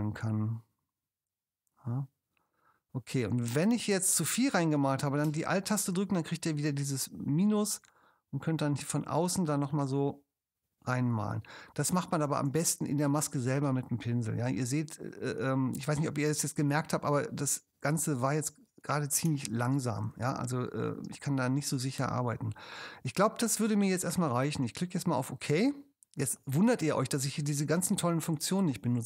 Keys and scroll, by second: 19.6 alt+super+0, 21.1 super+space.